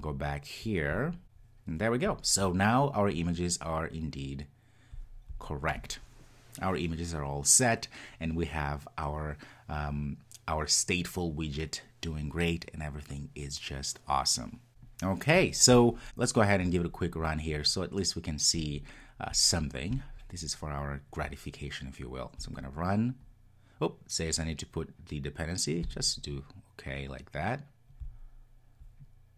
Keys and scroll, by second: 22.4 ctrl+r.